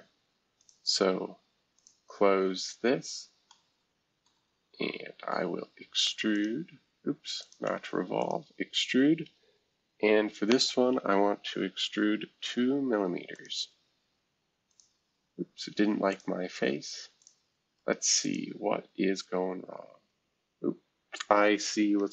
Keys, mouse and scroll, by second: 0.6 click, 1.7 click, 3.5 middle click, 6.3-9.8 drag, 12.4 2, 13.3-20.1 drag, 17.8-20.1 right drag, 20.1 scroll down 1, 20.6 scroll up 1, 22.0 F2.